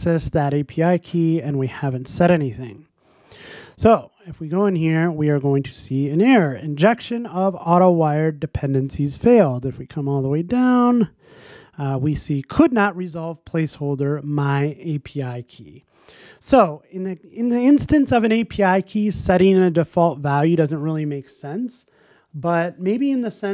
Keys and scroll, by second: 16.5 shift+Escape.